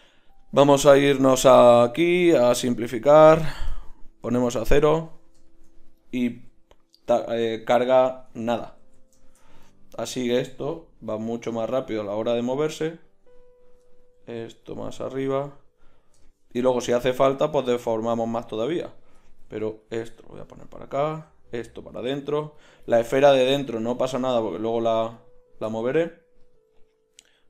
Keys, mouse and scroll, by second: 1.7 middle click, 5.7-6.3 middle drag, 6.3 z, 8.3 Tab, 8.8 z, 10.1-11.1 drag, 11.1 g, 14.2 g, 15.2 g, 17.5 g, 19.5 g, 20.9 g, 21.3 middle click, 22.3 g, 22.9 click, 24.2 g, 24.7-26.4 drag.